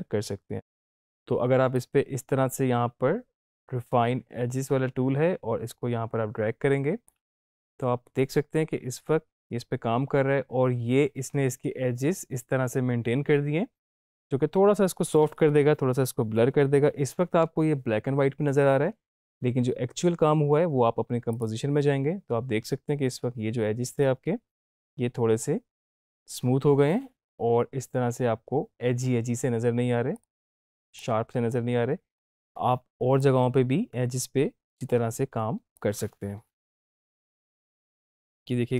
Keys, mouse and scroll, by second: 0.9 z, 1.8-7.4 drag, 21.4 click, 30.2 click, 30.9 space, 31.0-31.6 click, 31.6 space, 33.2-36.0 drag, 37.9 click.